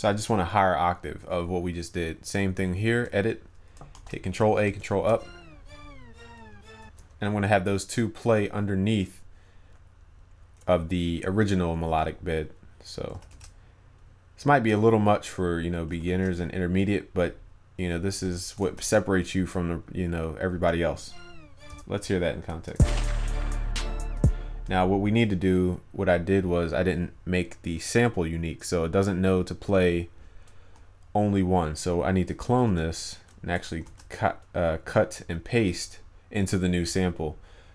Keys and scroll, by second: 4.0 ctrl+a, 13.2 ctrl+c, 13.4 ctrl+v, 16.0 ctrl+c, 16.2 ctrl+v, 18.8 ctrl+s, 33.9 ctrl+x.